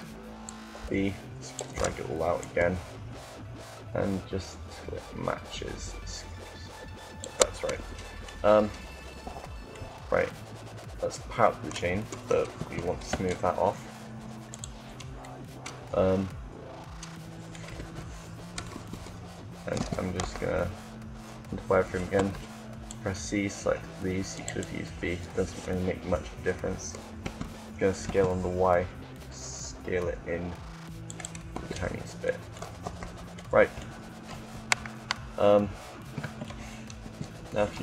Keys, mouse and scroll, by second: 0.9 b, 2.1-7.0 drag, 7.7 Tab, 8.8 z, 12.3 t, 14.2 click, 15.1-17.0 middle drag, 17.4 KP_7, 18.5 Tab, 19.6 a, 19.7 a, 19.9 z, 22.2 c, 24.2-25.4 drag, 26.9 s, 31.5 Tab, 32.7 z, 34.2 KP_1, 36.7 KP_1.